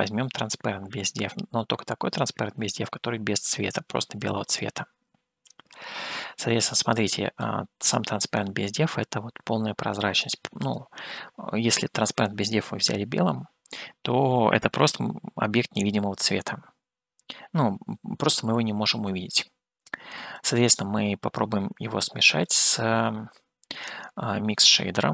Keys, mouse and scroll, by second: 2.7 click, 4.5-7.6 drag, 8.9-10.5 middle drag, 11.2 click, 20.7-22.6 drag, 24.7-25.1 drag.